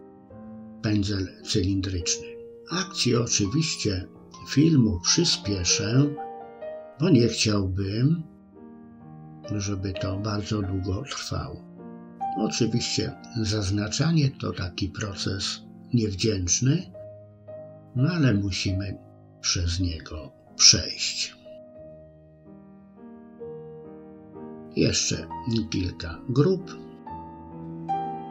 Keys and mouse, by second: 2.9 middle click, 3.5 KP_1, 4.2-5.3 middle drag, 5.5 KP_3, 5.9 shift+middle click, 7.0 click, 7.1 middle click, 8.2 c, 10.2 c, 15.5 middle click, 16.3 c, 19.2 alt+shift+click, 19.5 middle click, 19.8 middle click, 20.5 middle click, 20.7 middle click, 21.5 c, 23.6 middle click, 24.1 c, 25.3 middle click, 25.7 middle click, 27.0 alt+shift+click, 27.6 c.